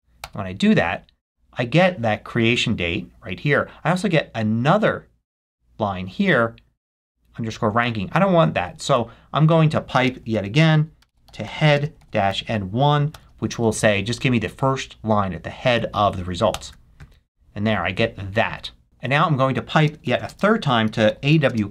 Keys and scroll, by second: 0.2 Return, 1.2 Return, 9.4 Up, 9.9-12.0 typing, 16.5 Return, 19.0 Up, 20.0 shift+\, 20.3 shift+space, 21.5 space.